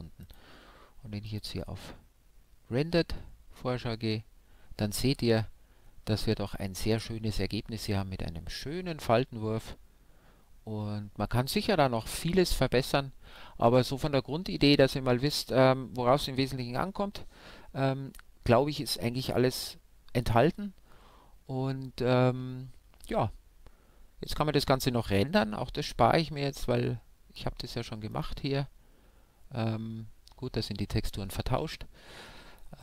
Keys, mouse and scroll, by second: 0.2-2.2 drag.